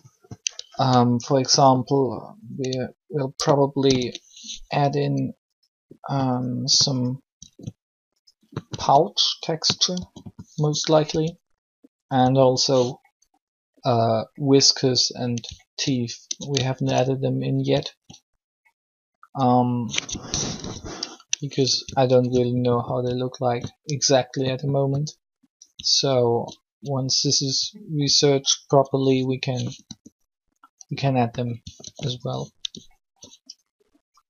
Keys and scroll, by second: 0.7 s, 3.7 ctrl+l, 7.3 r, 8.7 s, 10.1 s, 10.5 r, 10.9 s, 12.2 s, 16.3 alt+shift+Tab, 20.4 3, 29.8 r, 31.1 typing, 31.7 alt+r.